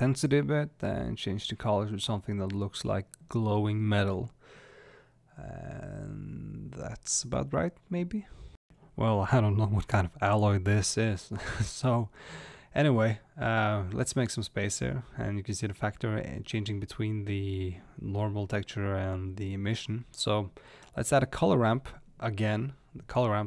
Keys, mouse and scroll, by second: 9.7 click, 10.5-11.1 scroll up 1, 11.1-12.8 shift+middle drag, 12.8 click, 14.2-19.1 drag, 19.2 shift+a.